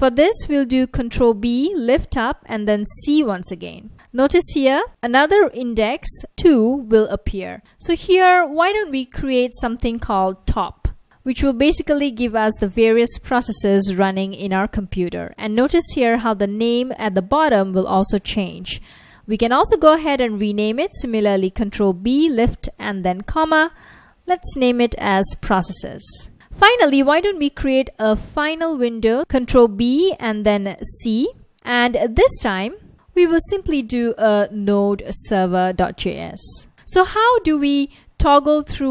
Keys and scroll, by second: 1.5 ctrl+b, 5.3 F1, 9.9-11.0 typing, 13.2 F1, 16.5 F1, 21.7 ctrl+b, 22.7 ,, 24.0-26.3 typing, 29.9 ctrl+b, 31.0 c, 33.1-35.9 typing, 36.5 Return.